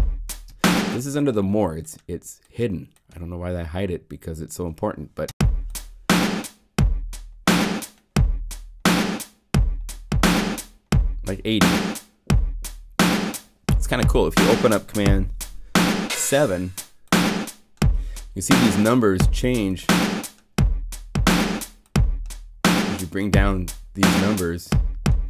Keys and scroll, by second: 15.4 super+7.